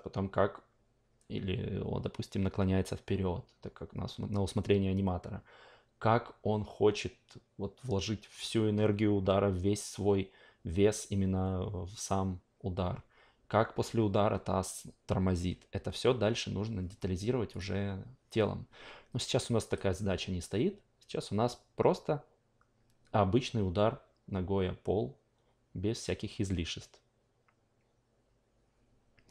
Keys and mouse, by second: 17.5 click, 19.6 click.